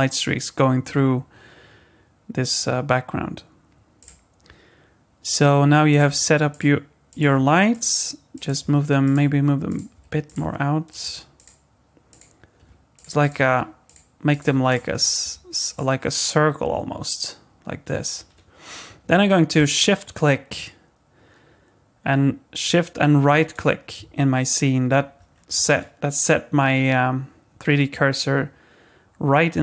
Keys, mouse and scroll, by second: 5.9 click, 6.1 g, 7.1 click, 7.3 g, 8.3 click, 8.6 g, 9.7 click, 9.9 g, 10.9 click, 11.0 g, 12.1 click, 12.6 g, 13.2 click, 13.5 g, 14.3 click, 14.4 g, 15.0 click, 15.2 g, 23.4 shift+right click, 25.3 scroll down 1, 25.7 middle click.